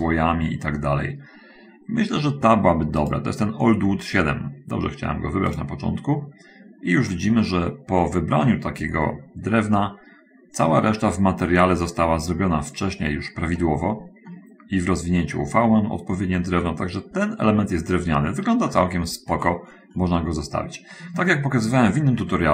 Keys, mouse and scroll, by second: 3.4 click, 5.6 click, 7.2 middle click, 8.2 middle click, 12.9 scroll up 1, 13.9 middle click, 14.3 click, 15.4 click, 16.4-17.6 drag, 18.0 middle click, 19.1 middle click, 19.8-20.3 scroll down 1, 20.3 middle click, 20.7-21.3 scroll down 1, 21.6-22.5 shift+middle drag.